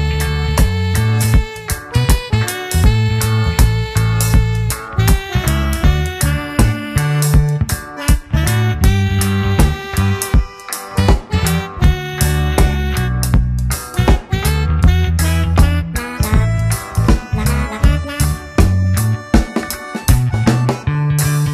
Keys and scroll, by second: 0.6 Return, 2.0 shift+F2, 2.3 ctrl+space, 3.0 w, 5.1 Return, 6.2 ctrl+d, 6.6 ctrl+space, 7.1 w, 9.0 Return, 9.7 shift+F2, 10.4 space, 13.7 ctrl+g, 15.3 ctrl+space, 16.4 Return, 21.0 ctrl+space.